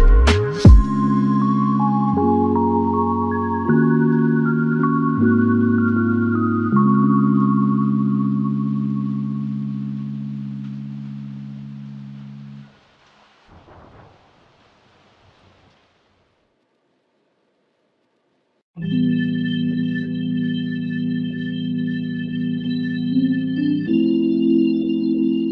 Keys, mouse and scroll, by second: 6.6 f, 11.8 alt+click, 13.4 ctrl+z, 14.6 alt+click, 19.6 ctrl+z, 24.8-25.2 typing.